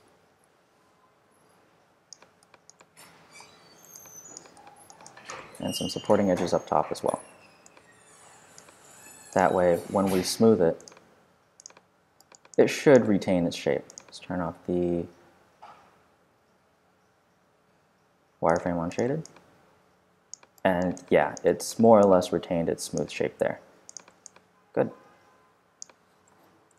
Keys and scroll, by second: 7.3 q.